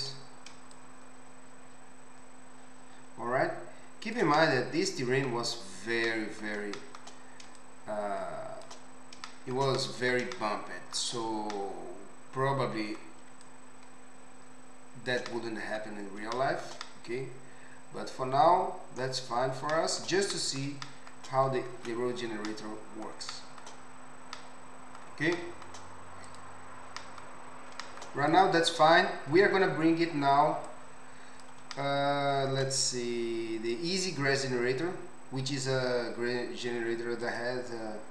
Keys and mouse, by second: 4.5 middle click, 7.1 middle click, 10.6-21.2 shift+middle drag, 21.7 ctrl+Tab, 23.7-26.4 middle drag, 26.4-30.6 right drag, 28.3 click, 28.3 middle click, 30.6 middle click, 37.4-38.1 drag.